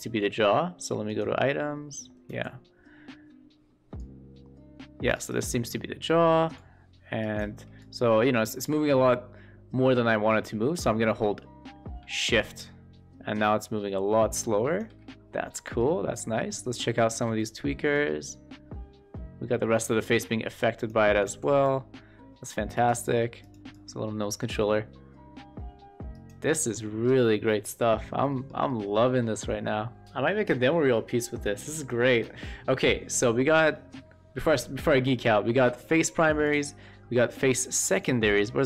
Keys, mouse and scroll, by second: 1.0 click, 2.2 e, 3.9-5.2 drag, 5.5-5.9 middle drag, 6.6 shift+click, 7.8-14.8 drag, 15.5 middle click, 16.5 q, 16.9 click, 17.3 w, 18.0-19.1 drag, 19.6 shift+middle click, 19.9 middle drag, 21.2 w, 21.7-22.9 drag, 23.7-26.2 drag, 26.7-27.0 middle drag, 27.7 middle click, 28.0 scroll up 1, 28.2 shift+middle drag, 28.6 middle click, 33.7 middle click, 35.6 shift+middle click, 36.4 click, 37.9 click, 38.3 click.